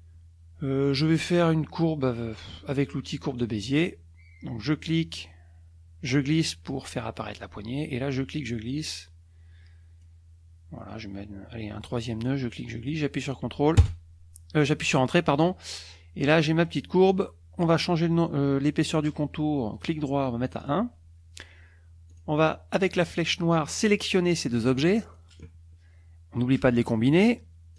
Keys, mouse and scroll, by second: 3.4 click, 4.7-6.9 drag, 8.1-10.2 drag, 12.2-13.1 drag, 13.8 Return, 19.7 right click, 20.6 click, 22.1 click, 23.9-25.3 drag.